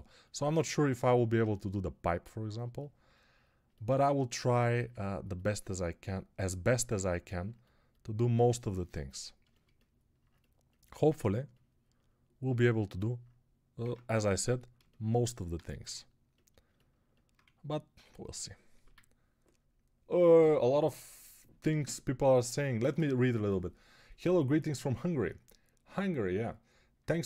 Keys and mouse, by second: 13.7 Tab, 14.0 3, 14.6-27.2 shift+middle drag, 15.7 x.